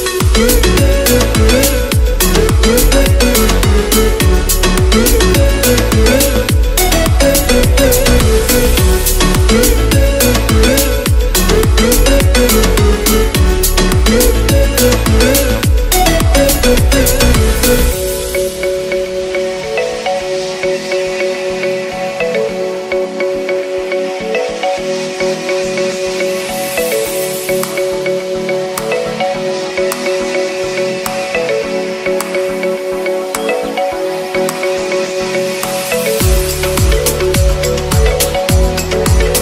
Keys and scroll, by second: 6.1 ctrl+BackSpace, 8.3 ctrl+z, 12.9 shift+BackSpace, 31.1 [.